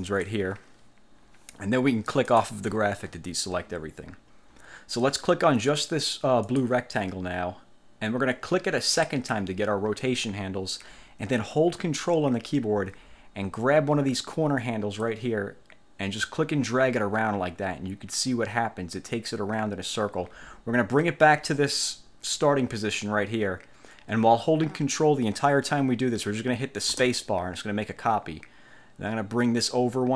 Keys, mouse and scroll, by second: 0.1 click, 2.4 click, 6.5 click, 9.0 click, 15.1-30.1 ctrl+drag, 27.1 ctrl+space.